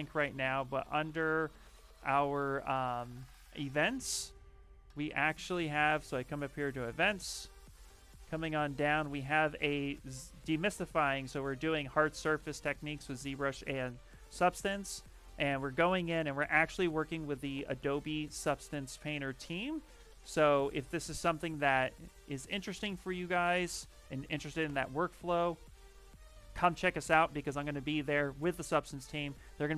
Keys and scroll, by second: 24.5 Return.